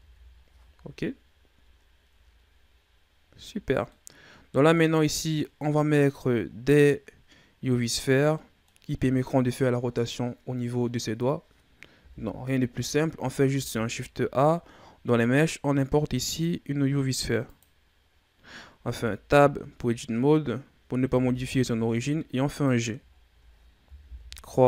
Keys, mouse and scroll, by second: 0.1-1.7 scroll down 10, 1.7-2.3 scroll down 3, 2.3-2.8 scroll up 5, 3.4-3.8 ctrl+scroll up 3, 3.8-4.9 middle drag, 4.9-5.3 scroll up 1, 5.3-7.3 middle drag, 7.3-8.1 scroll up 1, 8.3-11.4 middle drag, 11.9 KP_1, 13.4 shift+a, 18.0-18.7 scroll down 5, 18.7 Tab, 19.3-19.8 scroll down 2, 19.8-21.0 shift+scroll up 4, 21.0 g, 23.0-23.9 scroll down 1, 23.9 KP_3.